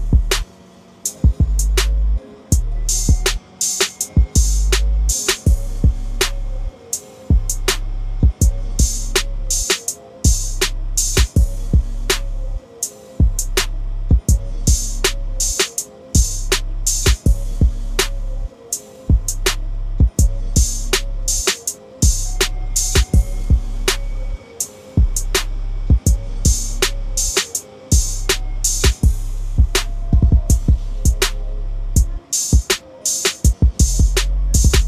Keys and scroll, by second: 15.8 ctrl+a, 16.8 ctrl+c, 19.8 ctrl+v, 30.8 ctrl+a, 31.8 ctrl+c, 32.5 ctrl+n.